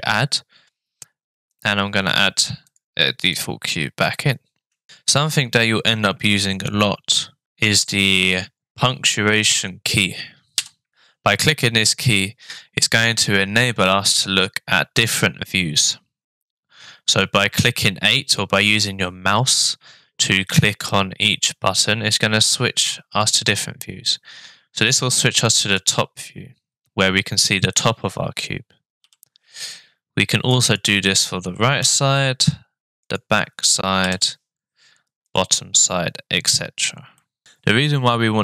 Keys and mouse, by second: 3.3-4.0 middle drag, 30.8 `, 31.8 `, 34.0 `, 37.2 middle click.